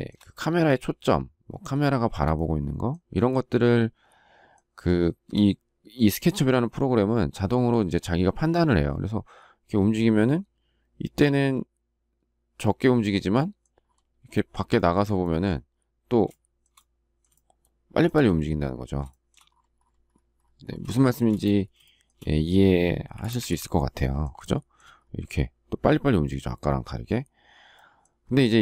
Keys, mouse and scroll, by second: 3.3 shift+middle click, 14.3 shift+middle click, 14.7 shift+middle click, 14.9 shift+double middle click, 16.3 shift+middle click, 17.3 shift+middle click, 19.1 shift+middle click, 20.9 shift+middle click, 21.8 shift+middle click, 23.1 Delete, 24.4 shift+middle click.